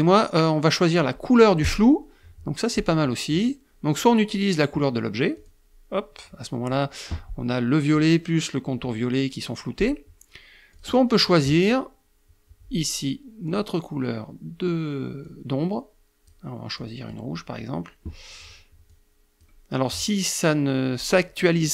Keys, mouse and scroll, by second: 1.2 click, 4.9 click, 10.3 click, 13.0 click, 14.8-16.0 drag, 16.3 click, 18.4 click.